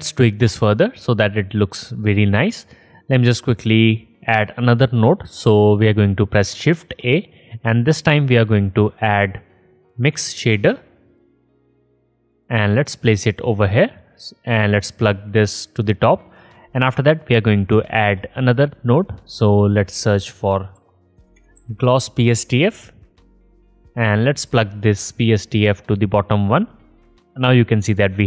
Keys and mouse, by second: 2.1-4.4 alt+drag, 5.7 middle click, 6.3-16.8 drag, 8.5 shift+a, 16.8-17.9 middle drag, 17.9-26.2 drag, 19.7 shift+a.